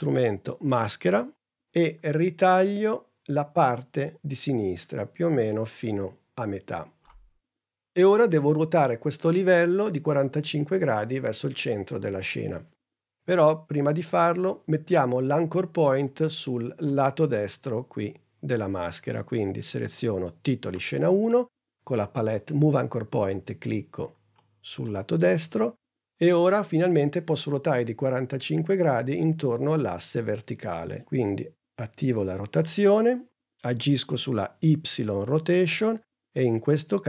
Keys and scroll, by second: 32.3 r.